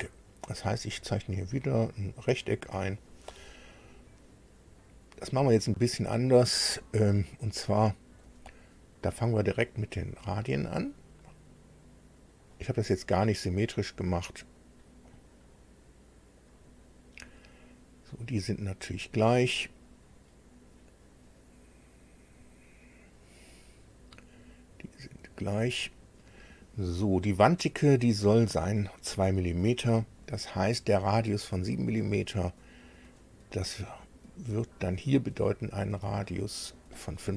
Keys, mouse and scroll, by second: 0.6 click, 2.3 click, 2.9 right click, 8.2 click, 10.4 click, 12.3 click, 14.6 click, 16.4 click, 17.3 right click, 18.7 click, 19.8 click, 21.0 click, 23.0 click, 25.4 click, 34.6 click, 36.7 click.